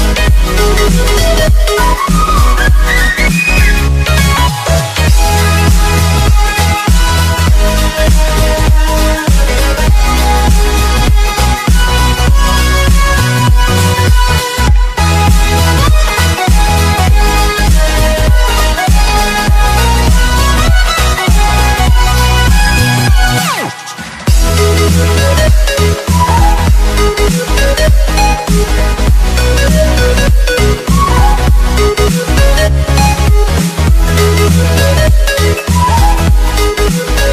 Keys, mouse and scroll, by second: 0.0 Delete, 0.4 click, 3.9-4.2 scroll down 2, 4.4 scroll up 2, 5.2 scroll up 1, 5.5 Tab, 6.0 click, 6.4 f, 6.9 Down, 8.1 click, 9.6-9.9 scroll up 1, 9.9 click, 10.2 alt+Tab, 10.6 click, 11.2 click, 11.4 alt+Tab, 11.7 right click, 12.0 click, 12.1 alt+Tab, 12.6 click, 13.7-14.2 alt+scroll down 4, 15.0 click, 16.0-16.7 scroll up 3, 16.7 Return, 17.1 click, 18.1 click, 20.6 Right, 21.0 Left, 21.4 Return, 21.9 click, 22.1 Delete, 22.4 click, 24.0 Tab, 24.4 click, 26.0 Tab, 26.4 click, 27.7 click, 29.3-30.2 scroll up 5, 30.5 click, 31.8 shift+2, 32.3 click, 33.3 click, 35.7 click.